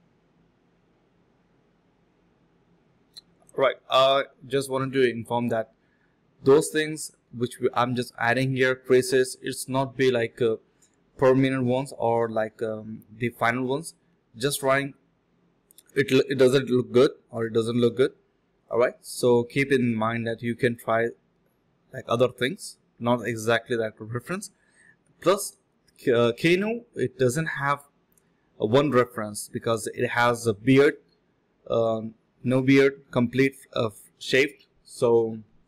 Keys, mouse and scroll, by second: 1.9 alt+click, 2.4 alt+click, 2.6 alt+click, 3.2 alt+click, 4.5 alt+click, 4.7 alt+click, 5.1 shift+click, 5.1 shift+double click, 5.2 shift+click, 5.6 alt+click, 7.3 ctrl+b, 7.6-10.0 typing, 11.4 typing, 13.9 alt+click, 14.2 alt+click, 14.3 alt+click, 15.3-16.2 typing, 17.8 alt+click, 18.0 alt+click, 18.1 typing, 18.9 alt+click, 19.1 alt+click, 20.2 typing, 25.1-26.1 typing, 26.7 alt+click, 27.2 alt+click, 27.8-28.3 typing, 30.4-32.7 typing, 32.3 alt+click, 32.6 alt+click, 33.2 alt+click, 33.4 alt+click, 34.0 alt+click, 35.1 alt+click, 35.4 alt+click.